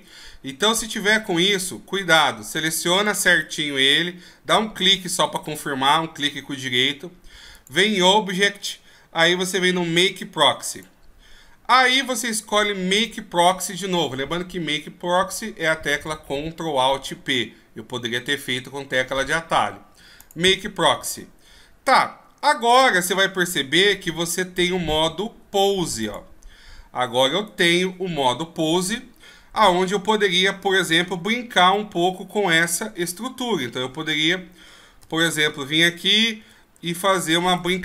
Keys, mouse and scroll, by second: 1.0 a, 1.6 scroll up 4, 1.9-2.9 scroll down 5, 2.9 right click, 3.4-4.2 scroll up 2, 4.6 scroll down 1, 10.8 click, 22.7 click, 27.5 right click, 32.8 KP_1, 32.8 r, 35.0 KP_5, 36.4 r.